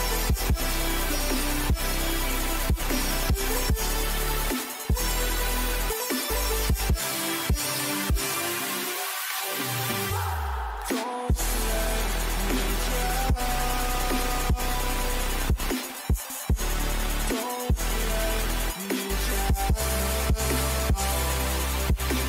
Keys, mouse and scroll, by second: 4.0-6.3 right drag, 6.3-8.5 middle drag, 8.5 a, 9.6 middle click, 12.5 ctrl+z, 12.9 ctrl+z, 13.3 ctrl+z, 14.2 ctrl+z, 15.4 a, 16.2-18.6 middle drag, 18.6-21.5 right drag.